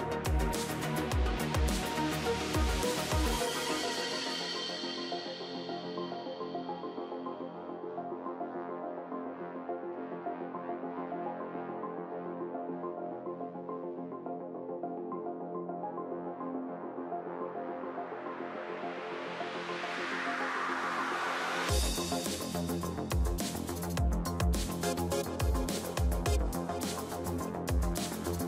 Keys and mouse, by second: 0.2 ctrl+s, 2.9 middle click, 3.2 z, 10.1-11.1 middle drag, 11.1 a, 11.6 a, 14.5 o, 15.2 g, 22.4 middle click, 23.4 ctrl+z, 23.5-24.7 middle drag, 24.8 middle click, 28.0 KP_1.